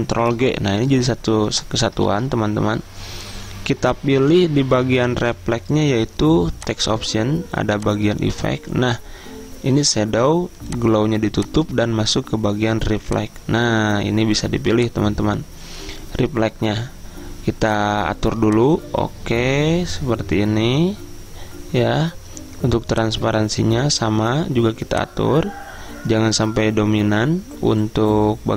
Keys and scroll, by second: 0.3 ctrl+g, 2.1 ctrl+z.